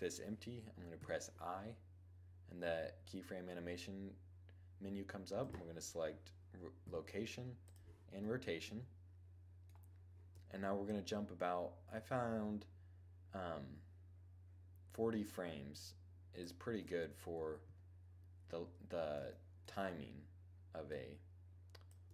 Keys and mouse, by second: 0.6 i, 6.4 i, 7.8-8.8 middle drag, 8.9 middle click, 9.6 right click, 16.5-17.3 middle drag, 17.2 KP_2, 18.0 1, 18.8 middle click, 20.5-22.1 drag.